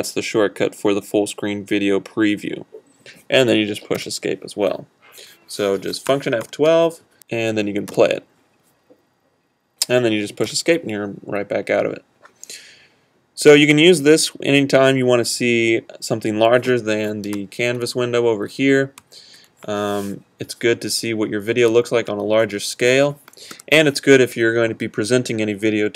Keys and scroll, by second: 4.0 Escape, 21.8 super+fn+F12.